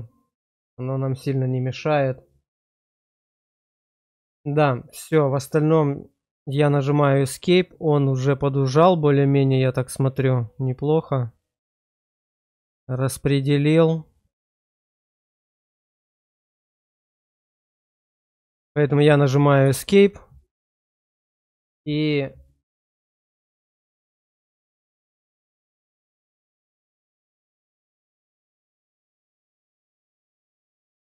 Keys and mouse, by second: 3.8 shift+click, 8.9-19.0 drag, 19.7 Escape, 23.2 shift+middle click, 27.2 click, 28.5 middle click, 30.0 Tab, 30.0 click.